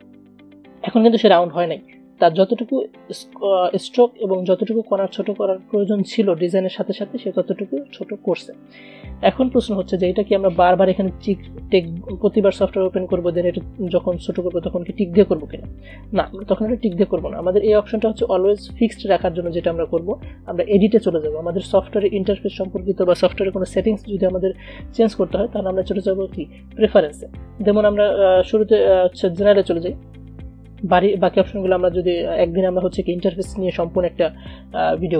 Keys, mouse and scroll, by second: 0.2 a, 1.8 v, 8.9-9.8 typing, 10.3 click, 16.4 click, 20.9 click, 27.0 click, 29.7 click.